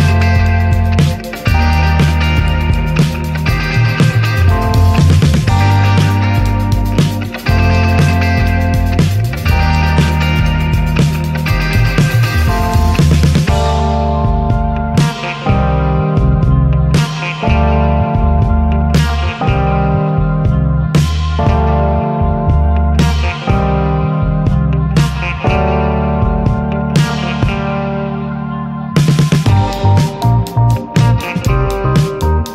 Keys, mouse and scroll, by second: 0.2 middle click, 0.5 ctrl+s, 0.7 shift+middle click, 0.9-1.4 scroll up 1, 1.4 /, 1.8-4.0 middle drag, 4.0-5.3 scroll up 1, 5.3 scroll up 1, 5.9 shift+middle click, 6.8 click, 7.2-8.0 scroll down 9, 8.0 middle click, 8.2-8.6 scroll up 3, 8.4 shift+middle click, 8.7 middle click, 9.6 ctrl+z, 10.7 scroll up 3, 11.0 click, 11.4-11.8 shift+middle drag, 11.8 drag, 12.0 click, 15.1 click, 15.7-16.7 shift+middle drag, 16.7 click, 17.3-18.9 drag, 19.8 click, 20.9 click, 21.3 shift+middle click, 21.5-22.2 scroll up 1, 22.2-23.7 drag, 23.7 middle drag, 24.0 scroll up 2, 24.3-24.7 shift+middle drag, 24.8 right click, 24.9-25.4 middle drag, 25.7-26.3 shift+middle drag, 26.3 click, 27.1 r, 29.7 alt+middle drag, 30.2-31.5 shift+middle drag, 31.5 click, 32.4 scroll down 2.